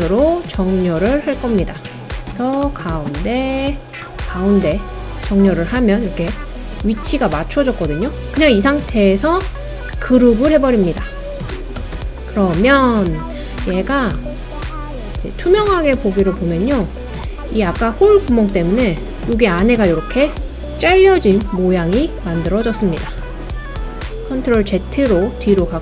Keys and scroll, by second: 23.3 super+z.